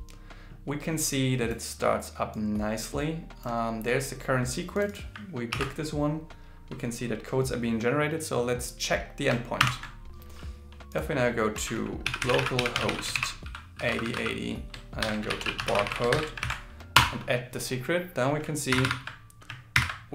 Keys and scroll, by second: 5.5 super+c, 13.2 shift+., 15.0 shift+7, 16.1 shift+7, 16.4 super+v, 19.8 super++.